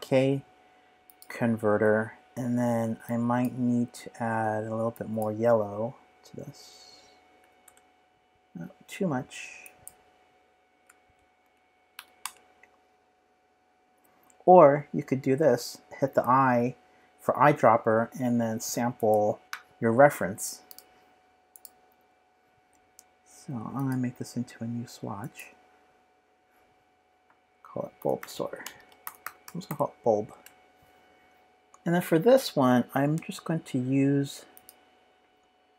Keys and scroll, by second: 7.1-7.9 typing, 10.5-11.9 typing, 12.2 Return, 16.1 i, 27.7-30.2 typing, 30.3 Return, 31.6 i.